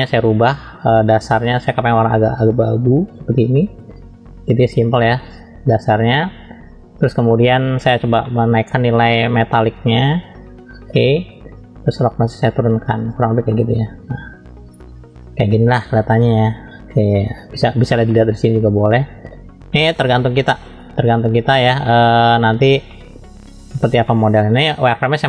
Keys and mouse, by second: 0.5 click, 4.7-6.8 drag, 8.3 middle click, 9.4 middle click, 10.2-11.3 drag, 12.0-13.1 drag, 13.5-17.8 middle drag, 18.1-19.3 middle drag, 21.8 middle click, 22.9 shift+middle click, 24.0 shift+middle click.